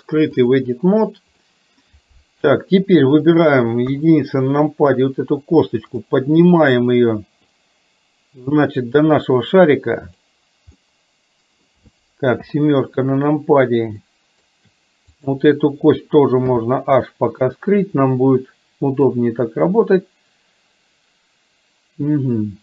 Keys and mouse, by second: 1.5 middle click, 3.4 click, 3.9 KP_1, 7.6-10.4 drag, 10.9 middle click, 12.5 KP_7, 14.1 shift+middle click, 15.2 click, 16.5 h, 17.9 click, 19.1-22.6 drag.